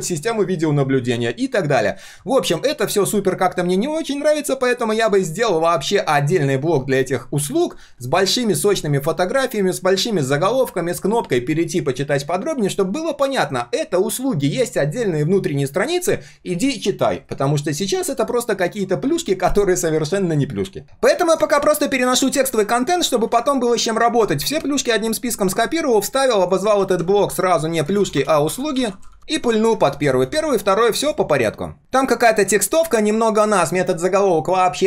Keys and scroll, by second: 23.1 ctrl+shift+v, 26.7 ctrl+g, 27.0 ctrl+r, 29.4 ctrl+[.